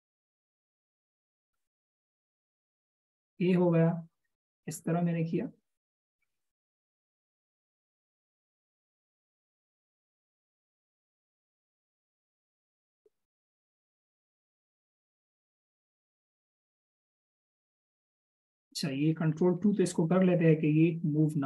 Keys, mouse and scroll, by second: 0.9 alt+shift+click, 9.2 alt+shift+click, 16.4-16.8 alt+shift+scroll up 1, 20.3 ctrl+2.